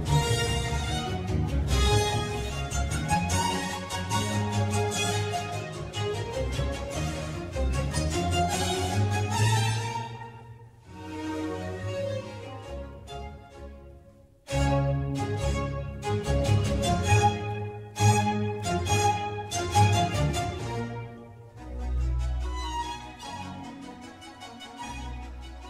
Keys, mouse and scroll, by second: 0.9-2.7 middle drag, 2.7 click, 3.2 middle click, 3.8 Tab, 5.4 ctrl+r, 7.9 ctrl+r, 10.7-13.4 scroll up 2, 13.4 r, 14.4 click, 17.1 ctrl+z, 17.5 ctrl+z, 19.8 click, 20.2 ctrl+r, 22.0 click, 22.2-23.5 middle drag, 23.5 ctrl+r.